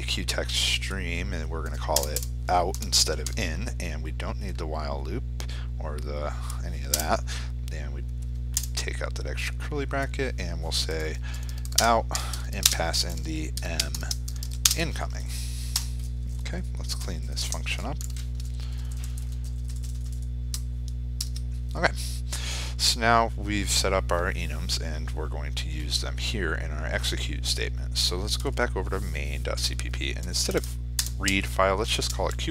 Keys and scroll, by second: 14.3 ctrl+space, 17.6 ctrl+u, 17.7 ctrl+i, 20.9 ctrl+j.